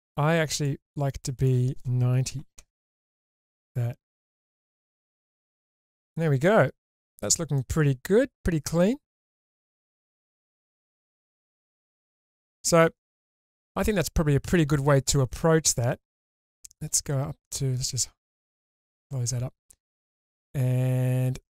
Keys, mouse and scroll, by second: 0.5 click, 1.4-2.9 drag, 3.9 scroll down 1, 4.2-5.8 middle drag, 6.2 scroll down 1, 6.4-7.1 middle drag, 7.3 scroll up 1, 7.6-11.4 middle drag, 11.8-12.2 shift+middle drag, 16.2 click, 18.7 click.